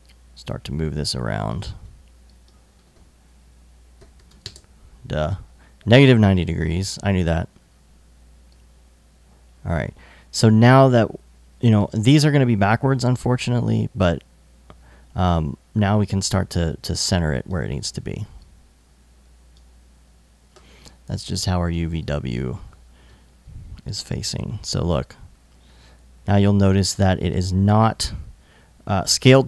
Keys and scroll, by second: 1.3 super+z, 3.4-4.4 typing, 20.2 alt+i.